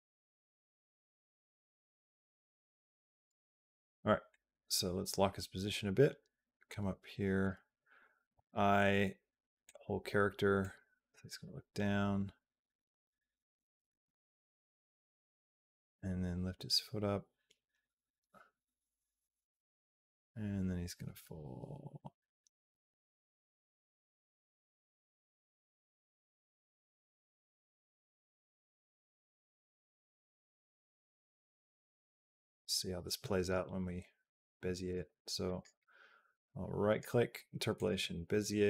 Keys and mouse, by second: 3.3 a, 4.1-7.3 drag, 8.1 i, 10.4-33.3 drag, 35.4 right click, 36.7 right click, 38.5-38.6 drag.